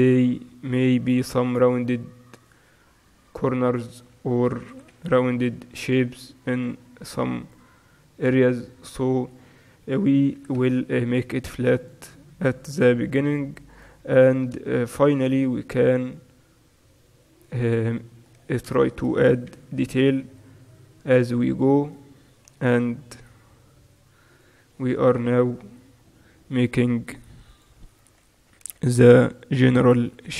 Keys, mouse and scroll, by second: 0.0-2.5 middle drag, 0.3 e, 3.0 s, 4.3-5.3 middle drag, 4.8 e, 9.0-10.5 drag, 10.5 e, 11.2 middle click, 13.0 r, 15.4 e, 18.9 middle click, 19.6 e, 21.9-24.4 right drag, 22.8 g, 25.3 right click, 26.1 middle click, 26.2-28.0 right drag, 26.2 g, 29.5-30.3 middle drag.